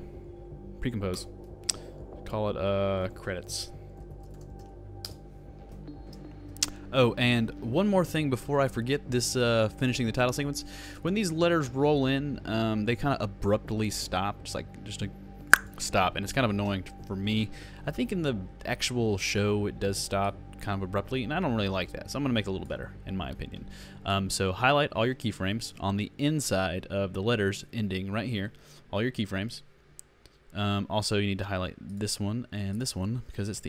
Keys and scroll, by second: 3.5 shift+c, 4.0 shift+r, 6.0 shift+space.